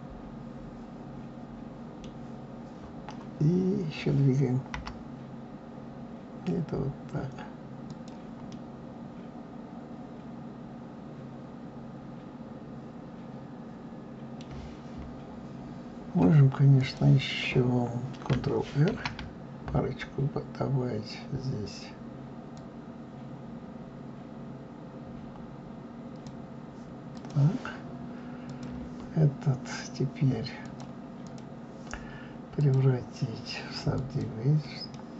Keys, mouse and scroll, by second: 4.7 g, 8.5-11.5 middle drag, 15.0-15.6 scroll up 2, 15.6-16.7 scroll up 1, 16.7 click, 18.8 ctrl+r, 27.1 click, 28.4 click, 30.6-34.9 drag, 34.9-35.1 middle drag.